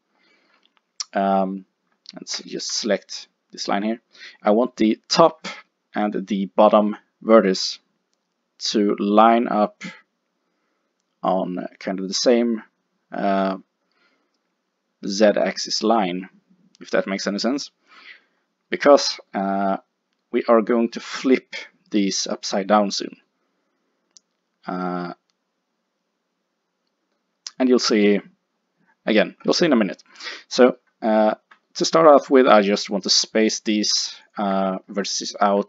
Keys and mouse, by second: 2.4 click, 18.1-22.6 middle drag, 25.8-29.8 middle drag, 34.3 click.